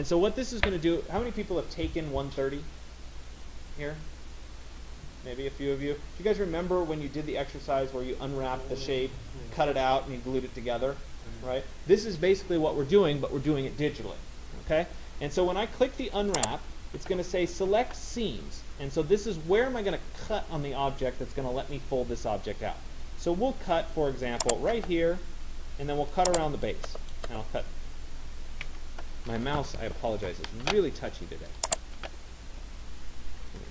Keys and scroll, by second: 28.4 Escape, 33.4 ctrl+z.